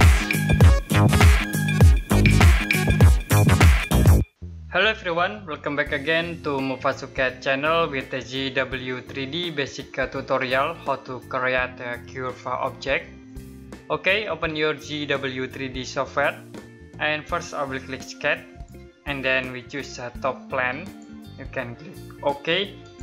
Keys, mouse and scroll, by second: 18.2 click.